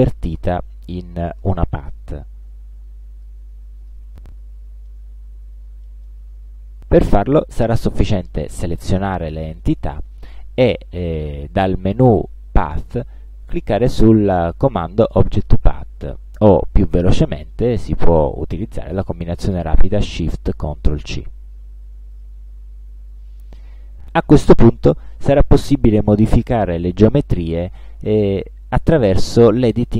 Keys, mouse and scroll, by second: 1.1 middle click, 3.2 shift+click, 3.9 shift+click, 5.0-6.3 middle drag, 11.6 click, 22.2 click.